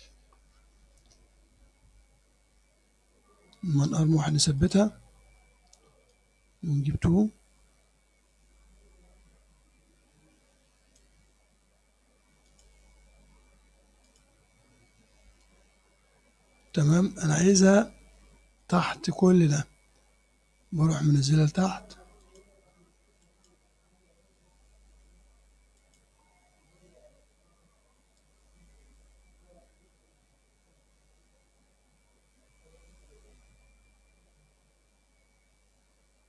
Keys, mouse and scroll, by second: 4.6 click, 6.2-11.2 drag, 12.5 click, 14.1 click, 15.5-19.8 drag, 22.3 click, 23.3 click, 25.8 click, 28.3-36.2 drag.